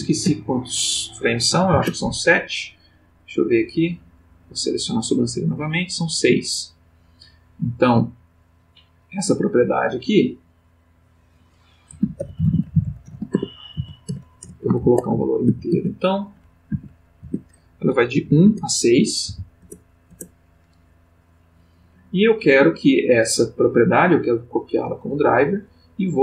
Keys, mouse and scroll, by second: 0.2 Tab, 1.5 7, 1.7 Return, 3.1 click, 4.3 click, 5.8 click, 6.7 click, 8.6 click, 10.4 click, 11.1 click, 12.0-14.4 typing, 14.1 shift+Tab, 14.8 shift+Tab, 15.4 shift+1, 15.7 shift+Tab, 16.7 1, 17.2 Tab, 18.2 1, 18.4 Tab, 19.2 6, 19.6 Return, 22.4 right click, 25.2 click.